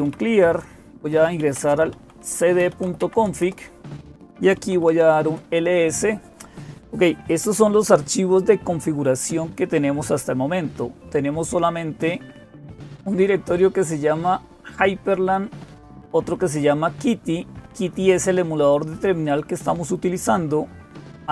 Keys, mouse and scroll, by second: 0.0-21.3 typing, 3.2 Return, 12.7 ctrl++, 14.5-16.0 drag, 16.5-18.5 drag, 19.0-21.3 drag.